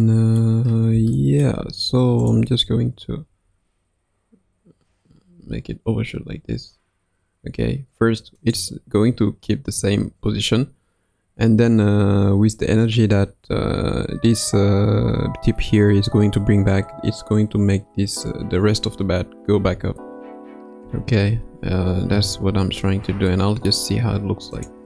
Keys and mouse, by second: 0.1 middle click, 1.1-1.5 shift+middle drag, 2.2 click, 3.3 r, 19.6 a, 20.8 i, 23.4 middle click, 24.5 click.